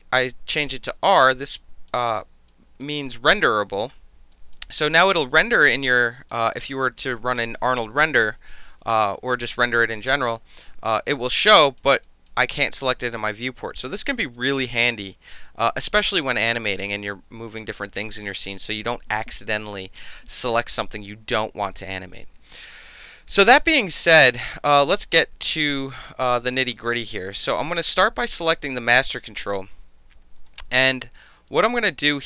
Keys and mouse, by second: 1.6 alt+click, 1.9 alt+middle click, 2.5-2.8 alt+drag, 2.8-4.3 alt+middle drag, 4.3 drag, 4.9 drag, 6.0 alt+click, 6.5-6.8 alt+drag, 10.3 alt+right drag, 11.0 drag, 11.6 drag, 12.0 drag, 12.5 drag, 13.0 drag, 13.6 drag, 14.8 drag, 15.3-16.4 alt+drag, 16.6 alt+right click, 16.8 alt+drag, 18.5 click, 24.1 click, 25.8 click, 26.3 alt+drag, 26.7 alt+right drag, 27.1-27.4 alt+middle drag, 27.5 alt+click, 28.5 alt+click, 31.1-31.5 alt+right drag, 31.7 alt+click.